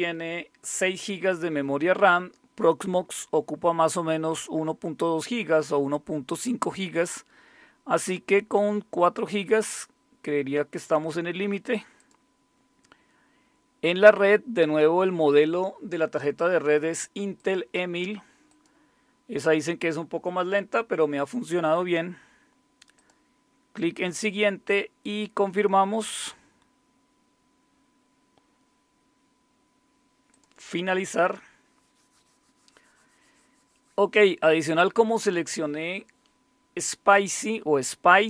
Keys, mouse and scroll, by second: 12.0 click, 17.4 click, 18.5 click, 23.0 click, 23.5 click, 26.2-27.6 scroll down 1, 27.6-30.3 scroll up 1, 30.3 click, 30.9 click.